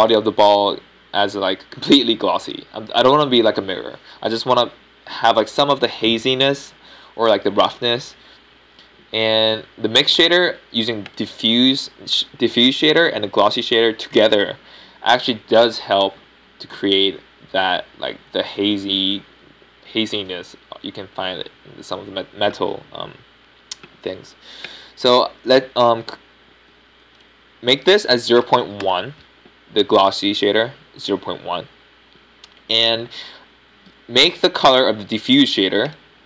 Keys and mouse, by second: 14.9-17.3 drag, 26.6-27.5 drag, 27.5-36.2 middle drag.